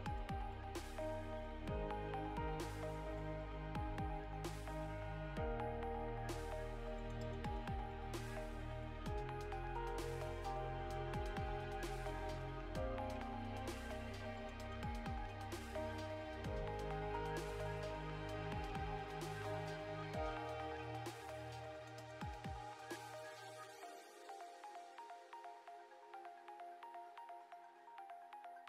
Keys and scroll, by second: 9.8 ctrl+space, 10.3 Down, 10.5 Down, 11.0 Return, 13.6 ctrl+/, 14.1 ctrl+s, 26.3 BackSpace.